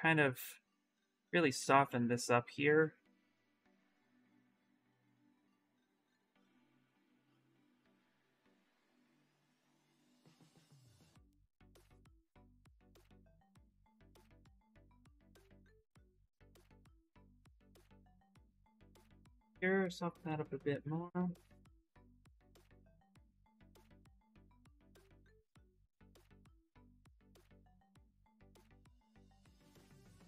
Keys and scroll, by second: 1.5 w, 2.7 q, 3.0 ctrl+z, 3.8 w, 8.5 ctrl+z, 11.5 ctrl+z, 17.6 q, 19.6 w.